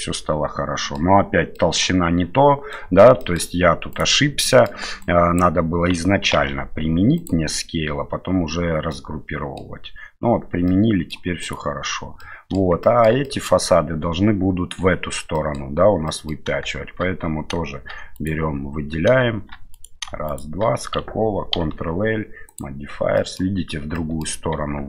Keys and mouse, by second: 1.5-2.7 middle drag, 3.2 shift+middle drag, 3.9-4.5 right drag, 4.5 middle click, 5.0-5.4 drag, 6.3 ctrl+a, 8.9-9.6 middle drag, 10.7-11.1 middle drag, 11.4 right click, 12.2-12.6 middle drag, 12.8 shift+middle drag, 13.2 middle drag, 15.3 middle click, 16.1 middle click, 18.2 right click, 19.7 right click, 20.3 shift+right click, 21.5 ctrl+l, 23.2 middle click, 23.9 middle click, 24.5 Tab.